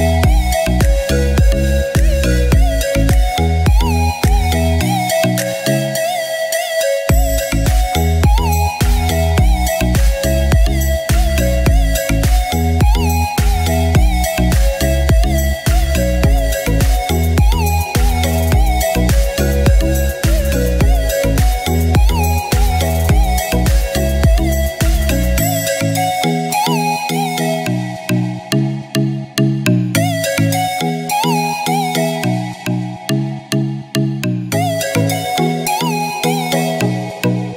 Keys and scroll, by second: 0.3 space, 3.4 space, 6.7 space, 10.7 space, 12.8 space, 14.8 space, 18.6 space, 25.0 ctrl+z, 29.1 space, 32.4 space, 33.7 space, 34.5 space, 36.7 space.